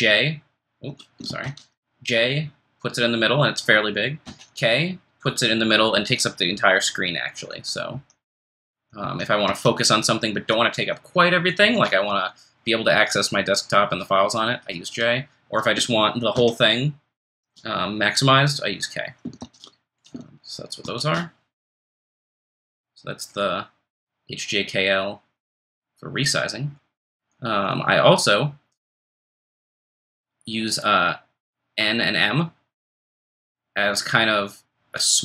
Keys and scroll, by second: 1.4 ctrl+shift+super+j, 4.2 ctrl+shift+super+k, 7.5 ctrl+shift+super+j, 7.9 ctrl+shift+super+k, 8.3 ctrl+shift+super+j, 9.0 ctrl+shift+super+k, 9.5 ctrl+shift+super+j, 16.3 ctrl+shift+super+k, 20.8 ctrl+shift+super+j.